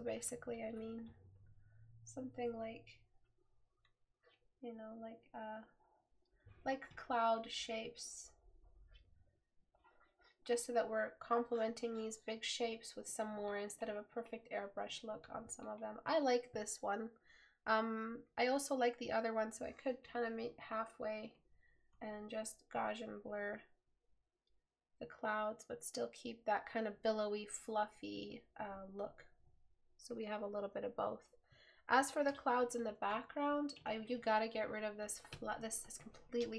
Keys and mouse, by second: 34.3 right click.